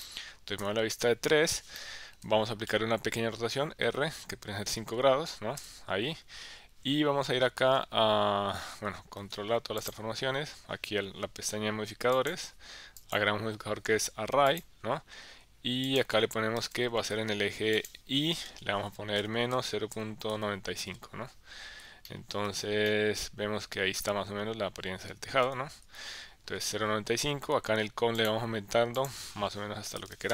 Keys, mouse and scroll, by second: 0.6 KP_3, 1.8 shift+middle click, 3.8 r, 4.7 KP_5, 5.6 KP_Enter, 9.2 ctrl+a, 13.0-14.6 drag, 15.9-17.3 drag, 17.9-21.3 drag, 22.1 shift+middle click, 22.9-24.9 middle drag, 25.4 KP_1, 25.8 KP_3, 28.2 click, 29.0-30.3 drag.